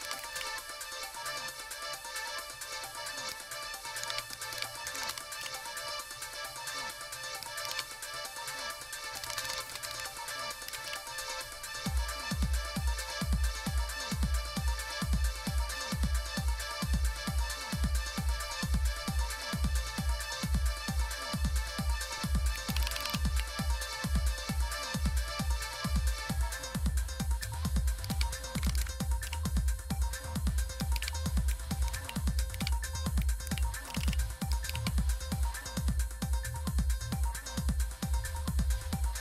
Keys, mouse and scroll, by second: 0.0-0.8 typing, 4.0 super+h, 4.5 super+d, 4.6-5.6 typing, 7.6 super+w, 8.7 click, 8.9-10.5 typing, 10.6 Down, 10.8 Return, 12.8 click, 14.6-15.1 scroll down 1, 15.1-16.0 scroll up 1, 16.6-18.4 scroll down 1, 18.4-19.0 scroll up 1, 19.0-20.3 scroll up 1, 20.3-22.5 drag, 22.7 ctrl++, 22.8 ctrl++, 22.9 ctrl++, 23.7-24.1 scroll down 1, 24.1-24.7 scroll up 1, 24.7 scroll down 1, 28.0 super+d, 28.3-29.3 typing, 30.9 super+Left, 31.8 ctrl+c, 32.5 super+Right, 33.4 ctrl+v, 33.9 Return, 34.0 Return, 34.1 Return, 34.7 super+Left, 35.6-36.7 scroll down 1, 37.2-39.2 drag.